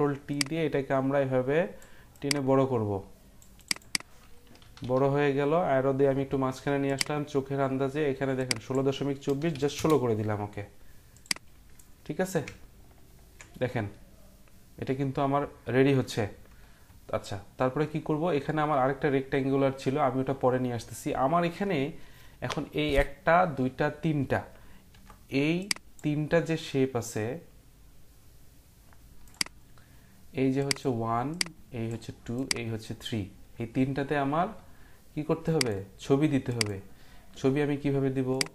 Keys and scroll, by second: 4.6 Down, 4.8 Down, 9.0-9.7 typing, 24.9 Print.